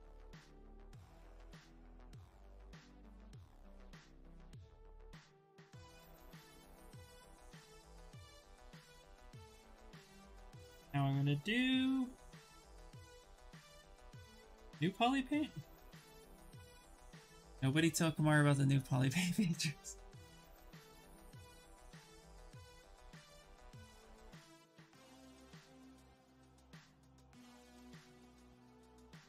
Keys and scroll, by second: 2.9 ctrl+z, 3.0 ctrl+z, 3.1 ctrl+z, 25.5 w.